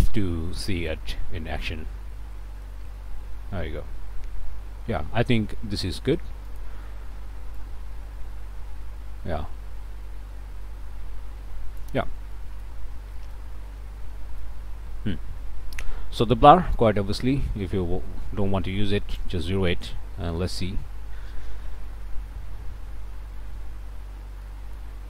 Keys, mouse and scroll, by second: 3.2-12.0 drag, 12.3 click, 13.3-14.6 drag, 16.7-19.4 drag, 20.5 F12, 24.0 middle click, 24.4 click.